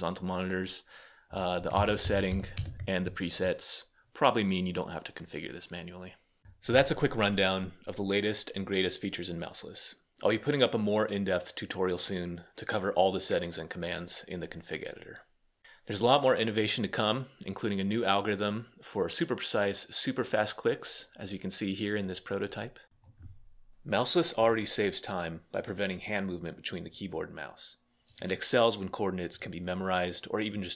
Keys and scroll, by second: 1.5 Down, 1.5 Return, 1.5 Up, 1.5 ⟲, 1.8 Up, 2.1 Up, 2.3 Return.